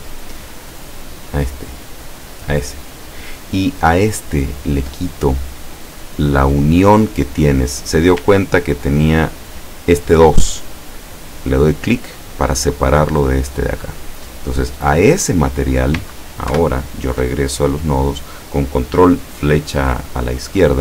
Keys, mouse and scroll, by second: 0.7 right click, 1.6 right click, 4.9 click, 9.0 click, 11.9 click, 16.5 ctrl+Left.